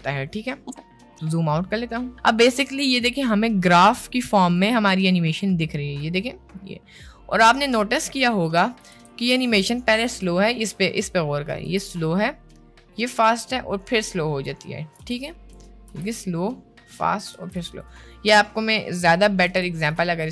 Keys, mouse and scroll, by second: 1.6 middle click, 6.1-7.5 drag, 8.9 space, 9.5 space, 10.2 click, 11.6 space, 15.2 space, 15.4 click, 16.0 space, 17.4 space, 17.8 click, 18.3 middle click, 19.4 shift+d, 20.2 click.